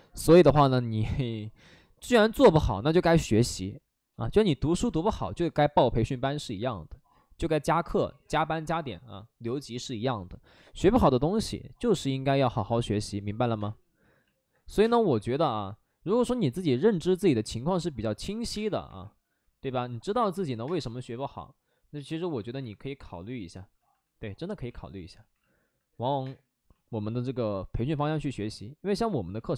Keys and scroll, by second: 13.5 space, 14.6 3, 14.7 space, 15.1 3, 17.0 space, 18.2 alt+s, 18.4 space, 18.8 3, 20.2 ctrl+z, 20.5 space, 22.3 alt+s, 24.6 ctrl+z, 24.8 ctrl+z, 26.1 space, 26.6 space.